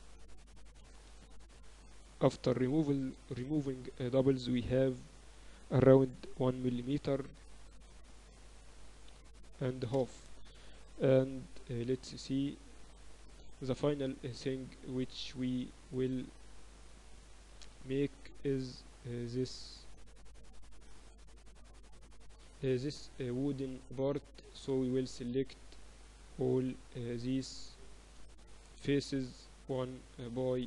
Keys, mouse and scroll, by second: 0.7-2.8 typing, 1.4-3.4 drag, 5.6 e, 11.7 KP_8, 12.0 KP_6, 12.8 Tab, 14.3 KP_7, 14.9 z, 22.2 middle click, 25.3 right click, 25.6 Tab, 25.9-26.9 right drag, 26.9 middle click, 27.6-29.2 drag, 28.3 right click, 29.1 a, 29.2-30.6 middle drag, 29.4 z.